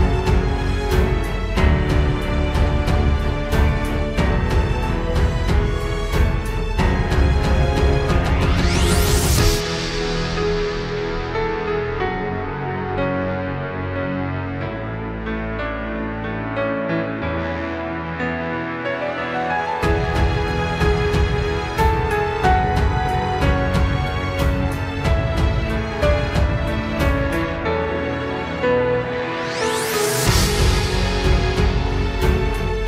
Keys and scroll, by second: 0.0 ctrl+space, 0.5 ctrl+space, 1.9 ctrl+z, 2.1 ctrl+j, 2.3 ctrl+z, 3.1 ctrl+space, 3.9 ctrl+space, 5.9 ctrl+z, 5.9 ctrl+space, 6.6 ctrl+space, 6.6 ctrl+z, 7.3 ctrl+space, 8.2 ctrl+z, 8.8 ctrl+space, 9.8 ctrl+z, 11.4 ctrl+space, 12.0 ctrl+s, 13.6 ctrl+s, 13.9 ctrl+space, 15.7 ctrl+space, 16.5 ctrl+space, 17.1 ctrl+space, 18.6 ctrl+space, 26.5 ctrl+space, 30.0 ctrl+space, 30.8 ctrl+space, 31.0 ctrl+z, 31.5 ctrl+space, 31.8 ctrl+s.